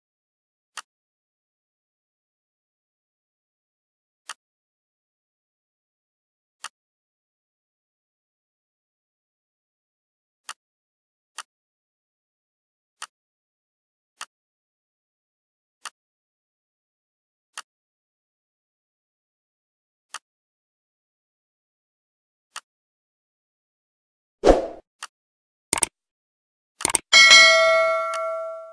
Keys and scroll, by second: 2.9 Delete, 18.6 g.